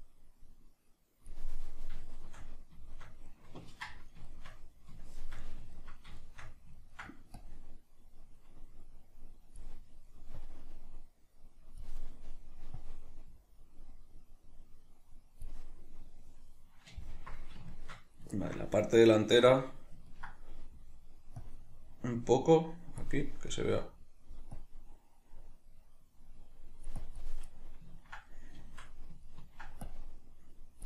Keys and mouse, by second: 1.8-7.3 shift+middle drag, 7.3-9.7 drag, 9.7-10.3 middle drag, 10.3-12.0 drag, 12.0-12.8 middle drag, 12.8-15.7 drag, 15.7-21.4 middle drag, 21.4-23.2 drag, 23.2-24.5 middle drag, 24.5-27.5 drag, 27.5-29.8 middle drag, 29.8-30.8 drag.